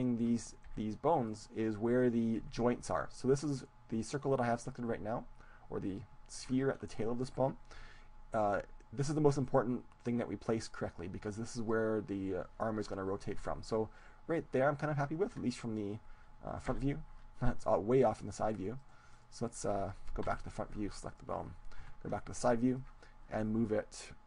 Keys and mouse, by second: 0.0-3.7 drag, 0.3-3.9 right drag, 0.9 g, 3.0 g, 5.9-8.5 drag, 8.5 g, 11.7-13.4 drag, 13.4 g, 14.5-16.3 drag, 16.7 KP_3, 18.7-22.4 right drag, 20.3 KP_1, 22.1 KP_3, 23.3-24.2 drag.